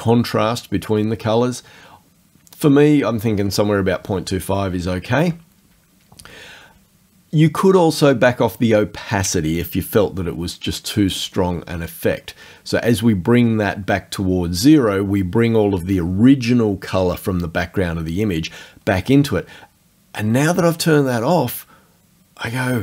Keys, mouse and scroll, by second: 11.1-19.5 drag.